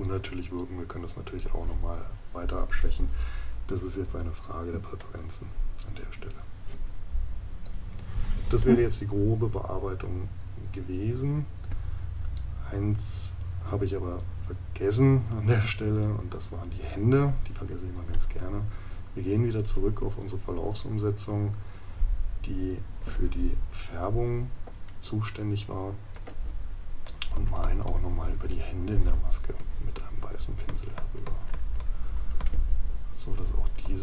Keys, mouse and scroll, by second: 24.9 right click.